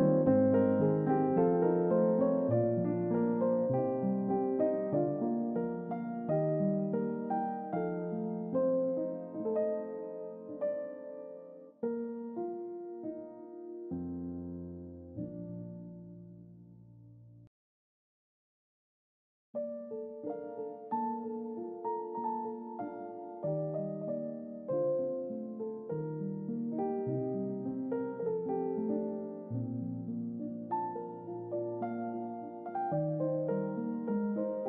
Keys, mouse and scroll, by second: 0.8 scroll down 2, 2.9 click, 6.2 scroll up 2, 8.2 click, 11.2 middle click, 12.5 middle click, 15.3 scroll down 2, 15.7 middle click, 17.4 click, 20.5 middle click, 21.9 click, 23.3 click, 24.5 click, 25.5 Tab, 27.8 typing, 29.7 click, 32.8 middle click.